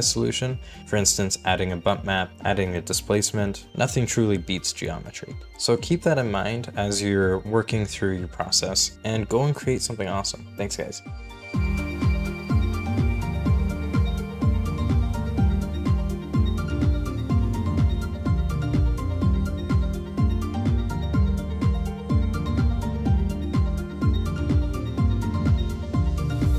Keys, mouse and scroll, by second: 3.9-4.3 scroll down 1, 4.3-5.1 scroll up 1.